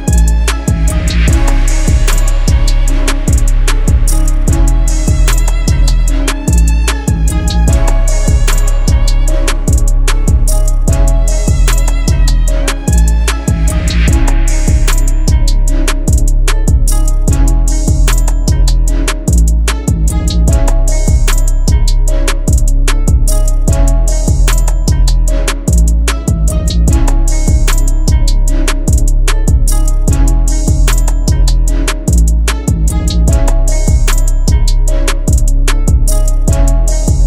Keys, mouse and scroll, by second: 0.0 alt+shift+click, 13.9 double click, 16.9-18.6 typing, 20.2-20.9 typing, 27.2 double click.